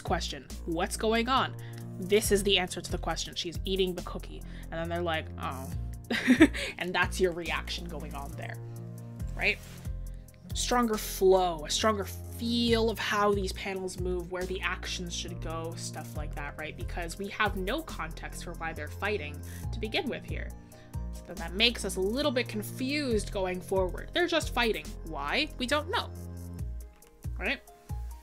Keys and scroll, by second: 23.8 scroll up 1, 24.6-26.7 scroll, 27.1-27.5 scroll down 1, 27.5-28.1 scroll up 1, 28.1-28.2 scroll.